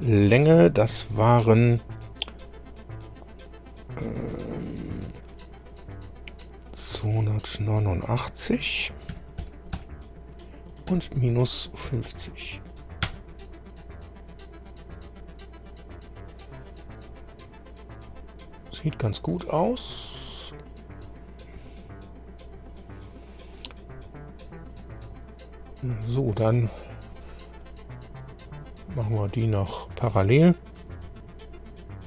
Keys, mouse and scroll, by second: 9.1 KP_2, 9.4 KP_8, 9.7 KP_9, 10.9 KP_Subtract, 11.9 KP_5, 12.1 KP_0, 13.1 KP_Enter, 17.3-17.7 scroll up 2, 18.4-18.8 scroll down 2, 19.9-20.3 scroll up 2, 21.1 scroll down 2, 28.6 click, 29.5 click, 30.8 p.